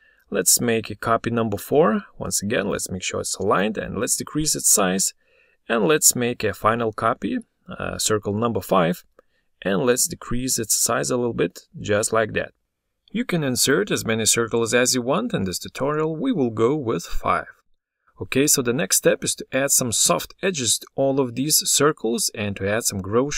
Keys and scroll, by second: 7.0 ctrl+d.